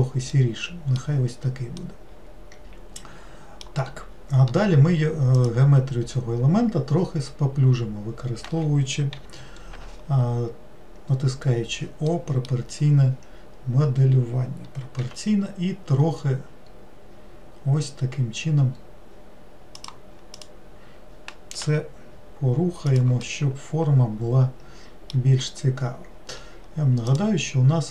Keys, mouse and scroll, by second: 0.3-4.9 middle drag, 5.4 click, 12.1-15.0 middle drag, 15.0 g, 20.4 click, 23.3-26.4 middle drag, 27.1 click.